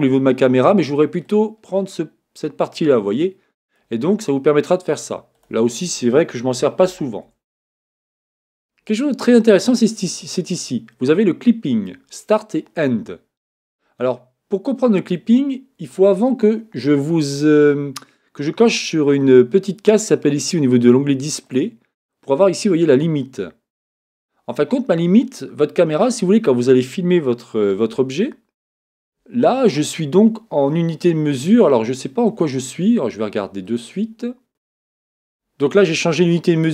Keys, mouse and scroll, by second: 1.2-3.2 drag, 5.3-7.2 drag, 13.7-17.2 middle drag, 23.2-27.7 drag, 27.7 KP_0, 33.7-35.7 drag.